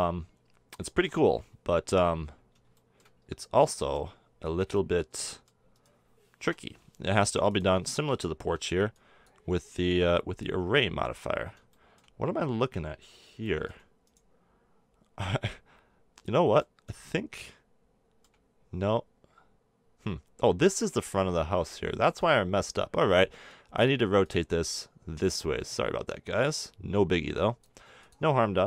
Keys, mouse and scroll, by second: 1.0-4.9 middle drag, 5.7 middle click, 6.4 KP_7, 8.4 b, 9.8 z, 13.6-14.0 middle drag, 14.0-16.3 right drag, 16.3-22.7 middle drag, 24.2 click, 27.2-28.6 middle drag.